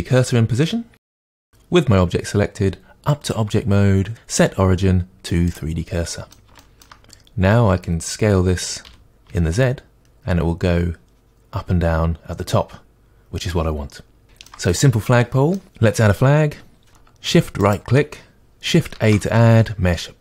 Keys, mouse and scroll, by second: 0.3-1.1 scroll up 2, 3.1-6.1 drag, 6.1-17.6 middle drag, 7.0-8.8 scroll down 2, 8.8 s, 17.6-20.1 shift+right drag, 20.1 shift+a.